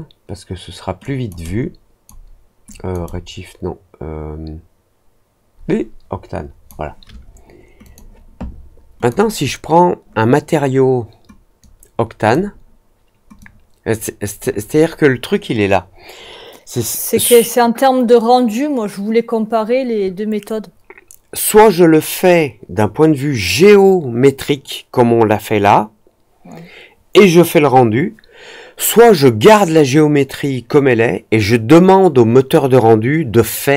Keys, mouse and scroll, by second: 0.9 click, 1.4 click, 2.6 click, 3.0-6.6 drag, 7.8 click, 8.9 click, 11.5-12.2 drag, 13.3-14.3 drag.